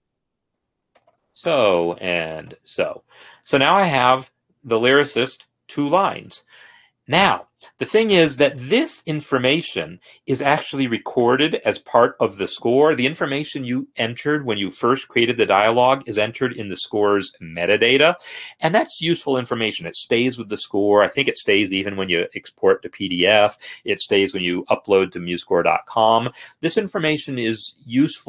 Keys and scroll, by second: 0.7-2.5 typing, 3.3 Escape.